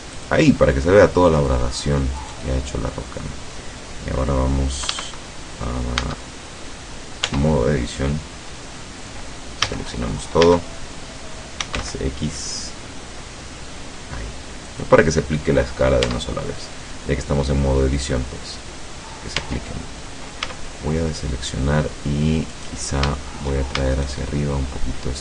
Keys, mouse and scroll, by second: 0.2 click, 2.2 right click, 4.9 Caps_Lock, 6.0 Caps_Lock, 7.2 Tab, 9.7-12.3 typing, 14.7 click, 16.1 Tab, 19.5 Tab, 20.5 a, 20.8-21.8 middle drag, 22.6 right click, 24.0 shift+right click.